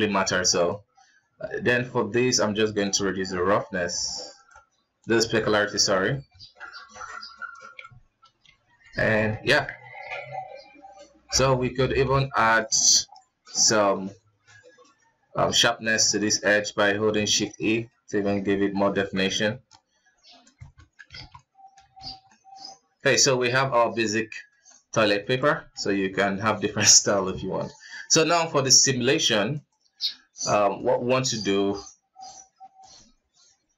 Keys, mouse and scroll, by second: 0.3 click, 2.6-5.9 drag, 5.9 scroll down 3, 6.1 alt+a, 6.3-7.1 middle drag, 7.1 right click, 8.2 ctrl+d, 8.6-9.1 middle drag, 9.1 scroll up 2, 9.4 Tab, 9.8 alt+a, 10.5 alt+right click, 11.4 alt+KP_2, 11.9 alt+right click, 12.7 shift+e, 15.8 Tab, 16.1 middle click, 16.7 Tab, 17.1-18.5 middle drag, 18.5 alt+right click, 19.2 shift+e, 20.3 Tab, 20.5-20.9 middle drag, 20.9 alt+a, 21.1-21.8 middle drag, 21.8 ctrl+s, 22.0-23.0 middle drag, 23.0-23.4 scroll down 4, 23.4-24.0 middle drag, 24.0 scroll up 2, 24.4-24.9 middle drag, 24.9 right click, 25.1 s, 26.9 KP_1, 29.3 click, 30.5 click, 32.5-33.7 drag.